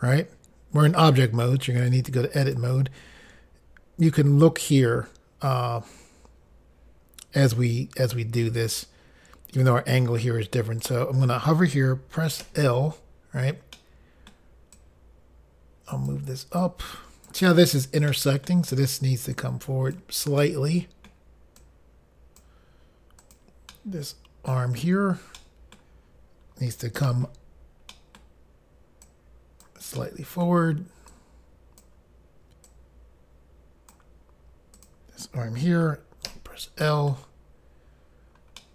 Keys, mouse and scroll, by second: 1.8 click, 2.4 click, 10.8 click, 10.9 click, 13.7 middle click, 14.7 click, 16.6 click, 18.1 middle click, 19.3 click, 20.4 middle click, 20.9 middle click, 21.0 middle click, 21.6 click, 23.2 click, 23.3 click, 23.7 middle click, 25.4 middle click, 27.1-27.9 typing, 27.9 middle click, 29.0 click, 30.0 middle click, 31.1 click, 32.7 click, 34.8 click, 34.9 click, 36.3 i, 36.9 middle click, 38.6 middle click.